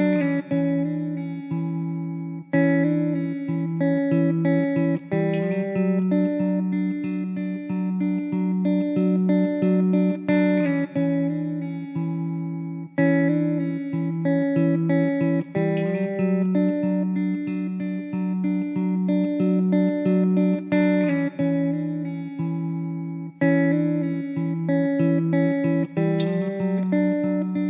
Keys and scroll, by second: 19.6 Tab, 24.9 Tab, 25.0 Tab, 25.5 z, 26.0 alt+z, 26.4 Tab.